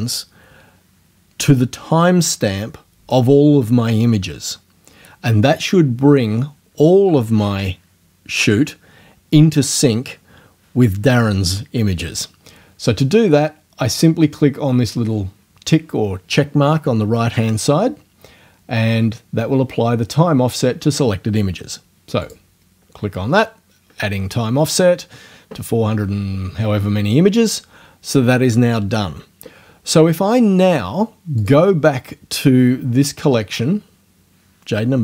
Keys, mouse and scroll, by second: 22.3 click, 31.4 click.